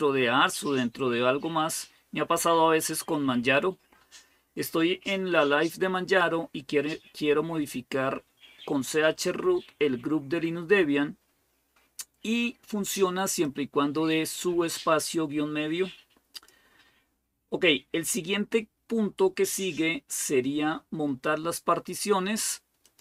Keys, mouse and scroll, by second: 13.1 click, 16.1 click, 17.0-17.8 scroll down 2, 19.1-19.8 scroll down 2, 22.6 click.